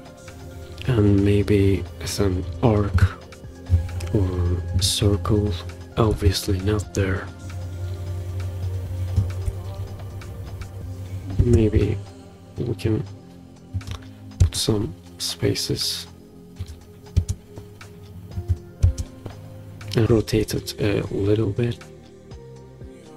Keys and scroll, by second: 11.5 space, 14.5 space, 17.3 space, 18.9 space.